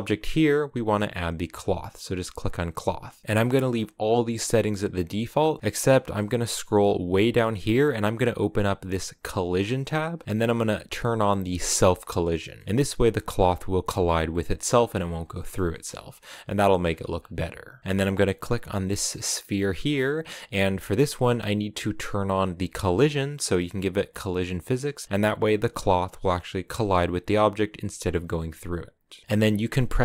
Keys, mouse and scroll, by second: 1.5-12.3 drag, 12.3 middle click, 12.4 scroll up 2, 14.9 scroll down 1, 15.1-19.1 middle drag, 19.1-22.7 right drag, 22.7-25.4 drag, 25.4-29.5 right drag, 29.5 middle click.